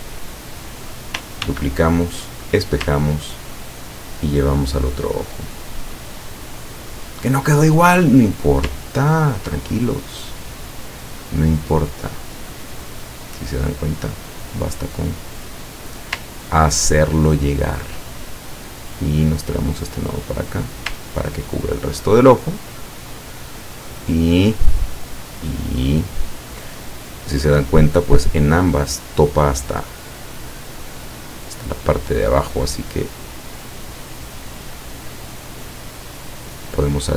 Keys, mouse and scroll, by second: 0.2 click, 1.5 ctrl+d, 2.5 click, 3.6-7.6 ctrl+drag, 9.0 ctrl+scroll up 1, 9.8 ctrl+click, 12.2 click, 13.3-16.2 drag, 16.3-16.9 ctrl+scroll up 2, 16.9-17.9 ctrl+scroll up 2, 18.7 click, 19.3-21.1 drag, 21.3-21.8 ctrl+scroll down 2, 22.0 ctrl+click, 23.3 ctrl+click, 24.0 ctrl+click, 24.4-24.7 ctrl+scroll down 2, 24.9 ctrl+click, 25.9-26.3 ctrl+scroll up 2, 30.2 click, 31.4 click, 33.7 click, 34.1 click, 35.3 click, 35.9 click.